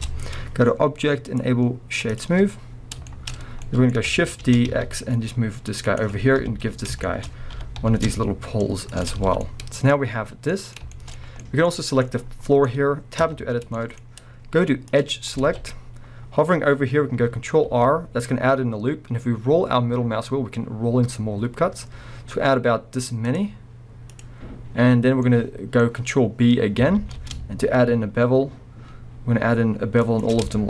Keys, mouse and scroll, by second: 0.0 Tab, 0.2-1.2 scroll up 2, 1.2-3.1 drag, 3.1-6.0 shift+middle drag, 3.4 scroll down 2, 4.4 shift+d, 6.0 click, 6.4 KP_1, 7.0-10.1 shift+middle drag, 7.6 g, 9.2 scroll down 3, 10.0-10.5 scroll down 2, 10.5-11.9 middle drag, 11.9 click, 12.2 scroll down 2, 12.4-13.2 middle drag, 12.7-13.2 scroll up 2, 13.2 b, 13.8 middle click, 14.9 click, 15.7-17.2 scroll up 2, 17.2-17.6 scroll up 1, 17.6 ctrl+r.